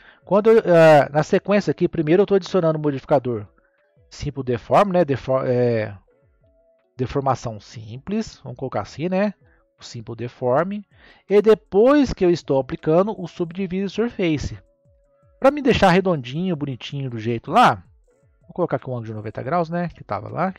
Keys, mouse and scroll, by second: 0.1-2.4 scroll up 1, 5.7 click, 14.9 scroll down 2, 18.5-20.5 drag.